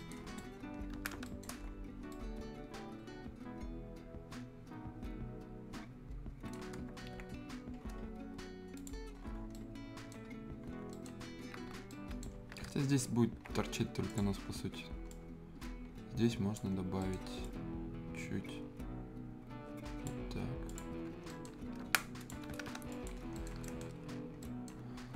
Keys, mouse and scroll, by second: 0.0 right click, 0.2 scroll down 1, 0.3 middle click, 0.6-1.0 scroll up 1, 1.0 Escape, 1.2 right click, 1.4 scroll down 1, 1.6-2.1 scroll up 1, 2.1-6.7 right drag, 6.7 scroll down 1, 7.1 z, 7.3-7.7 scroll up 1, 8.7 click, 9.2 scroll down 1, 9.3 scroll up 1, 9.5 right click, 10.3-10.9 scroll up 1, 10.9 right click, 12.3 scroll down 1, 13.4 ctrl+z, 14.1 click, 14.4-15.0 scroll up 1, 15.1-16.7 drag, 16.7 scroll up 1, 17.0 right click, 17.4-20.7 drag, 21.0 scroll down 1, 21.3 right click, 21.6 scroll up 1, 21.9 click, 22.4 scroll down 1, 22.5 Escape, 22.9 click, 23.2-23.6 scroll down 2, 23.3 right click, 24.0 scroll up 1, 24.4 right click, 24.5 Delete, 24.8-25.1 scroll up 1, 25.1 scroll down 1.